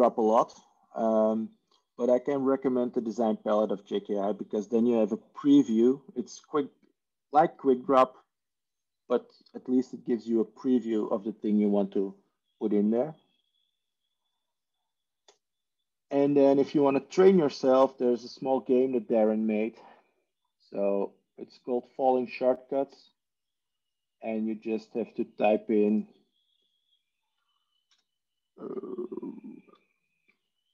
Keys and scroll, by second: 27.9 r, 30.6-30.7 typing.